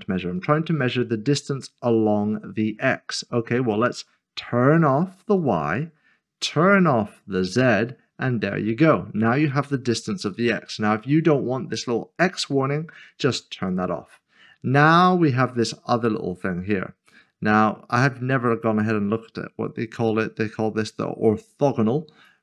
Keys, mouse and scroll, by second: 5.3 click, 9.9 click, 10.0-11.1 scroll down 1, 13.7 click, 14.8-15.3 scroll down 1, 18.5 click, 22.2 click.